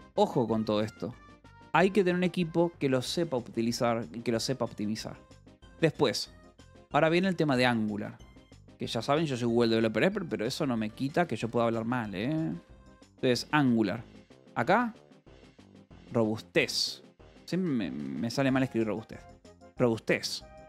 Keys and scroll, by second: 1.6 k, 2.1 Escape, 3.1 j, 4.1 o, 4.6 Return, 9.1 space, 10.5-17.9 typing, 19.2 =, 19.4 space.